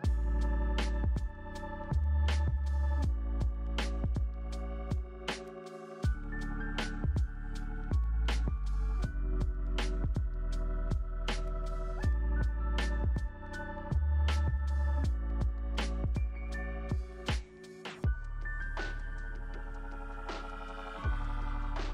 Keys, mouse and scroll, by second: 0.1 p, 1.0 F3, 1.5 alt+middle click, 2.7 middle click, 3.2-3.7 scroll up 1, 3.7 scroll up 1, 4.0 shift+g, 5.7 alt+middle click, 6.2 alt+middle click, 14.7 shift+g, 15.5 alt+w, 16.4 alt+w.